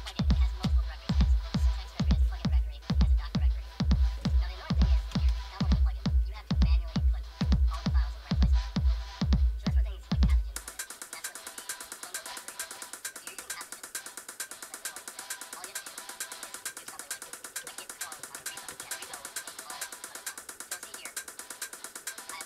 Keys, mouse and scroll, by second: 2.9 Return, 4.6-7.2 typing, 7.4 Return, 11.8 click, 13.4 super+Return, 16.3-19.3 typing.